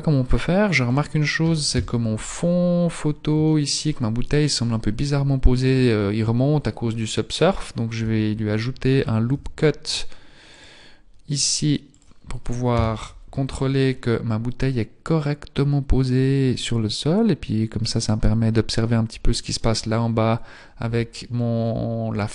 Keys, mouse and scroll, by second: 0.8 right click, 1.7 KP_3, 1.8 KP_3, 2.3-3.5 scroll up 9, 3.5 shift+middle click, 4.1 shift+middle click, 4.1 scroll up 1, 4.9-5.7 scroll up 1, 5.7 scroll down 5, 5.9-6.7 scroll down 5, 7.8 middle click, 8.0 Tab, 8.0 scroll down 1, 9.4 ctrl+r, 10.5 ctrl+r, 12.8 KP_3, 13.4-14.6 scroll up 11, 14.6-15.1 scroll up 3, 15.1-15.9 scroll up 3, 16.5-18.7 scroll up 3, 18.7-19.2 scroll up 1, 19.2-20.8 scroll down 14, 20.8 Tab, 21.6-22.3 scroll down 1.